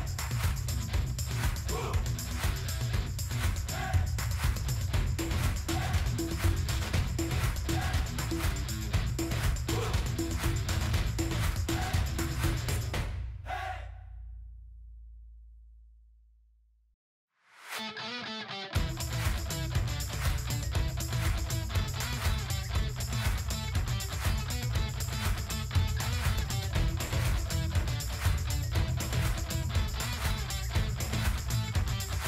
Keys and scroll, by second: 6.2-10.1 typing, 11.5 ctrl+a.